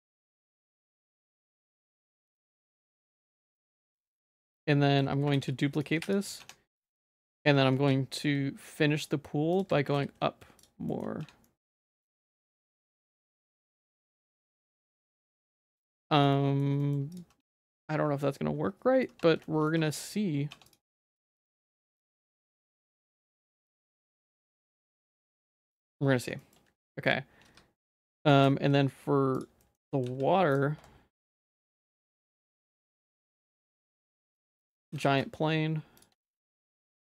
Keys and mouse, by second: 0.2 ctrl+s, 2.3 Tab, 2.5 2, 3.0 middle click, 4.1 alt+click, 4.6 middle click, 5.4 shift+d, 5.9 p, 6.4 Tab, 6.8 click, 7.2 Tab, 7.4 a, 7.7 e, 9.9 g, 11.0 shift+middle click, 11.2 Tab, 11.4 middle click, 11.8 shift+middle click, 12.2 s, 12.9 middle click, 13.6 shift+middle click, 14.2 ctrl+s, 15.3 middle click, 15.8 ctrl+s, 16.0 shift+middle click, 16.3 middle click, 16.8 shift+middle click, 17.3 Tab, 17.5-19.0 middle drag, 19.1 Tab, 19.5 middle click, 19.8 Tab, 20.5 Tab, 20.7 right click, 21.4 middle click, 21.9 ctrl+s, 22.5 middle click, 23.0 shift+middle click, 23.6 middle click, 24.0 ctrl+s, 24.3 click, 24.6 middle click, 25.5 middle click, 25.8 shift+middle click, 26.4 shift+middle click, 26.8 ctrl+s, 26.9 middle click, 27.3 Tab, 27.5 2, 27.9 middle click, 28.2 Tab, 28.4 shift+a, 29.7 middle click, 30.0 s, 31.1 shift+s, 31.8 shift+s, 32.3 g, 33.3 s, 34.4 middle click, 34.9 g, 36.2 Tab.